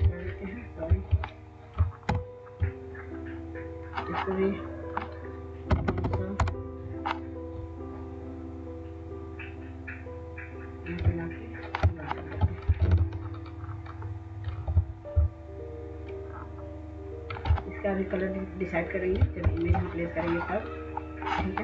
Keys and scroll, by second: 2.2 ctrl+-, 5.8 typing, 6.6 Return, 19.5 ctrl+0.